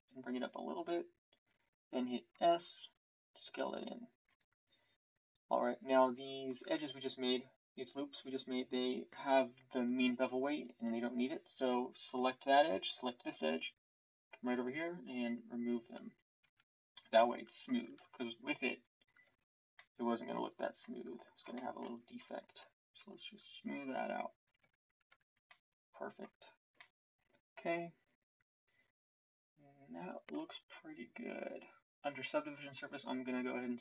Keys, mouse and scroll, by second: 2.3 s, 16.4 Tab, 18.0 Tab, 23.3 Tab, 24.6 Tab.